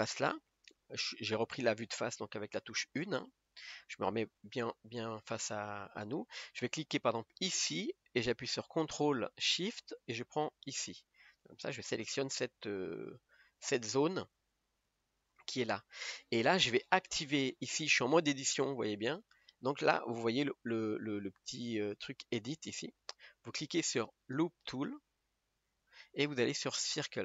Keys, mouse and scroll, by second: 2.6 KP_1, 5.2 scroll up 1, 6.7 click, 10.7 ctrl+shift+click, 21.8 click, 25.7-27.2 drag.